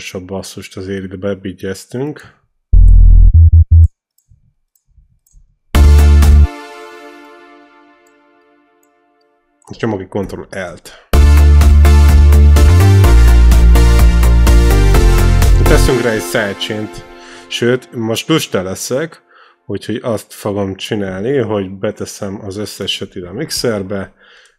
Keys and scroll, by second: 2.4 c, 3.2 e, 4.5 ctrl+c, 5.2 ctrl+v, 5.6 space, 10.5 ctrl+l, 10.9 space, 15.6 space, 23.8 ctrl+shift+l.